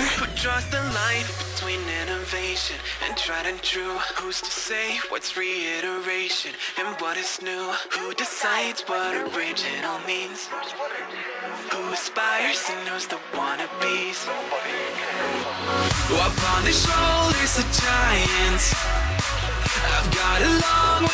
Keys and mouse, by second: 1.1 click, 2.7-4.0 drag, 4.8 click, 5.6 click, 7.1 click, 8.8 shift+click, 10.3 click, 11.3-12.4 drag, 13.2 click, 14.0-15.0 drag, 15.6 click, 17.1 click, 18.9 shift+click, 20.2 alt+click.